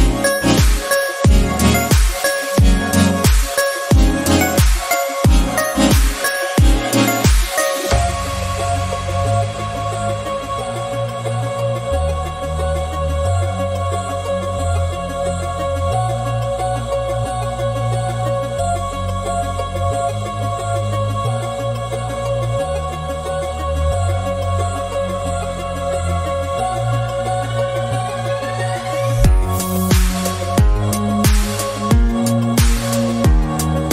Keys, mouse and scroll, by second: 0.3 2, 0.6 alt+click, 1.5 e, 3.2 KP_1, 3.4-4.0 scroll up 2, 4.0 click, 4.8 scroll down 1, 4.9 middle click, 5.5 e, 6.7 KP_1, 6.8 scroll up 1, 7.4-9.1 drag, 9.1 Tab, 9.3 scroll down 1, 9.4 middle click, 9.9-10.5 scroll up 5, 10.2 Tab, 11.0 q, 11.9 scroll up 1, 12.1 e, 14.9 Tab, 15.3 scroll down 7, 15.5 scroll up 1, 15.5-15.9 scroll down 7, 16.0 middle click, 16.5 KP_1, 16.8 scroll down 6, 17.1 scroll up 7, 17.5-18.6 shift+middle drag, 18.6-19.1 scroll up 1, 19.1 Tab, 19.3-20.1 scroll up 1, 20.1 alt+click, 20.8 s, 23.4 alt+click, 23.9 s, 24.9 Tab, 25.8 Tab, 26.6 alt+click, 27.0 s, 27.6 Tab, 28.1-28.6 scroll down 7, 28.7 shift+middle click, 29.5 scroll up 4, 29.9 Tab, 30.3-31.8 shift+middle drag, 31.8 alt+click, 32.3-32.7 scroll up 3, 32.7 shift+middle click, 33.6-33.9 scroll down 2.